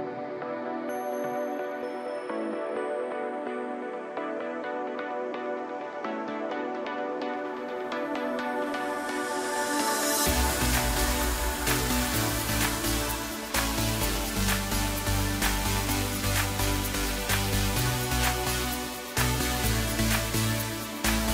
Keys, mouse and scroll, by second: 6.6 KP_3, 7.3 scroll up 1, 8.9 KP_1, 12.6 g, 16.9-19.0 right drag, 19.0 shift+b.